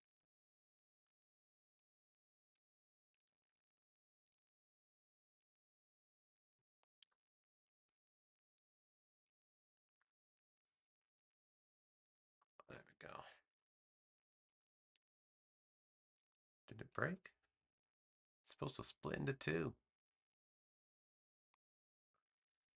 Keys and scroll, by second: 3.3 super+z, 6.9 BackSpace.